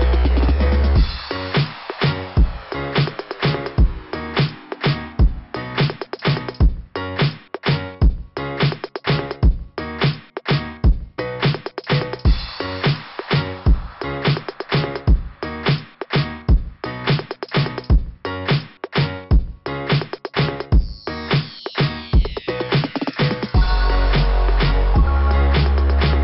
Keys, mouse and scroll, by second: 0.2 right click, 1.6 click, 4.1 click, 9.3 click, 9.4 click, 10.4 click, 10.7 click, 11.1 click, 11.6 click, 12.1 click, 12.4 click, 13.4 click, 13.7 click, 17.8 typing, 19.2 typing, 19.2 scroll down 2, 25.6 click.